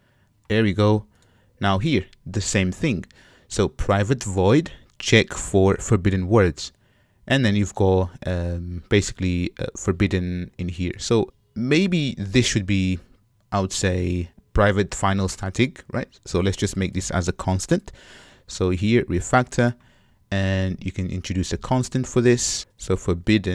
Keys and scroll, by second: 21.6 alt+super+c, 22.6 super+z.